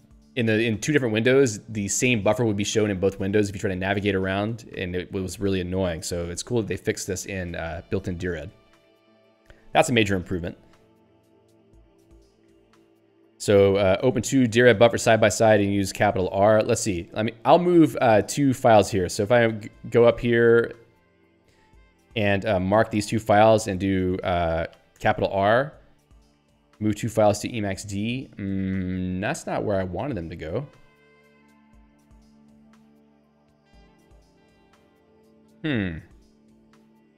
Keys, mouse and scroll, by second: 14.1 click, 19.5 ctrl+p, 21.8 ctrl+p, 22.6 m, 25.1 shift+r, 29.9 ctrl+g, 31.3 r, 33.9 ctrl+g, 34.7 r, 36.3 alt+x, 36.9-37.1 typing.